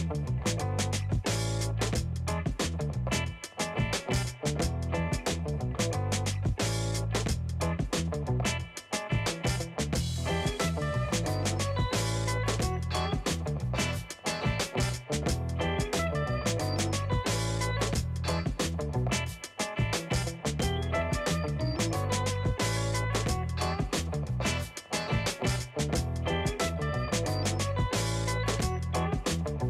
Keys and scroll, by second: 10.3 alt+shift+space, 18.6 space, 25.2 space.